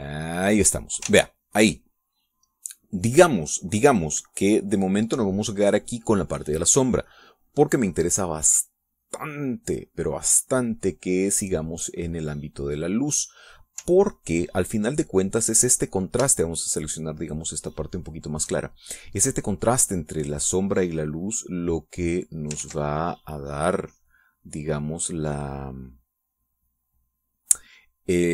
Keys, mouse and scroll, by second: 1.0 click, 2.0 ctrl+s, 5.1-6.1 middle drag, 8.0 click, 15.3-16.7 ctrl+drag, 17.2-19.6 shift+drag, 21.8-23.4 drag, 23.6 ctrl+z.